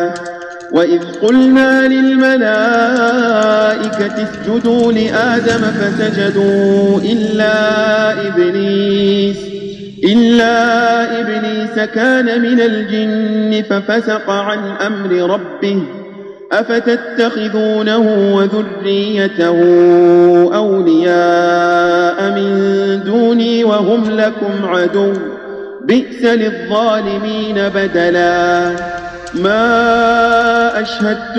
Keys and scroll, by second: 0.1 space, 1.2 space, 2.9 space, 3.7 space, 4.6 space, 9.9 Tab, 29.2 space.